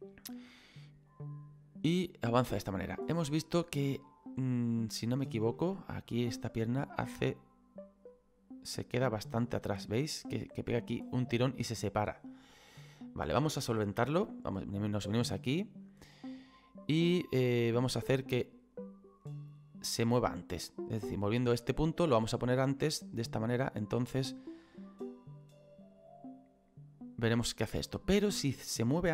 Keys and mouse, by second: 3.4 click, 5.6 middle click, 6.7 click, 14.3 right click, 17.5 right click, 22.5 click.